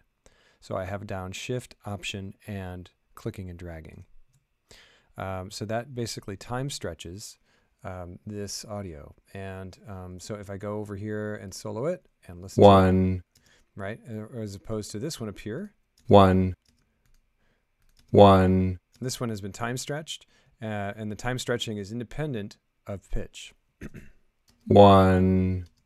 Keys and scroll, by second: 12.4 space, 13.3 space, 15.9 space, 24.4 space, 25.6 space.